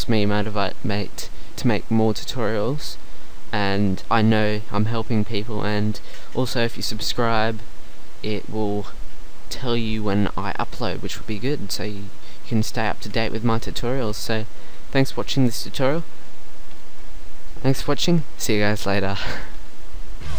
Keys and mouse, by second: 12.2 middle click, 13.0 a, 13.7 middle click.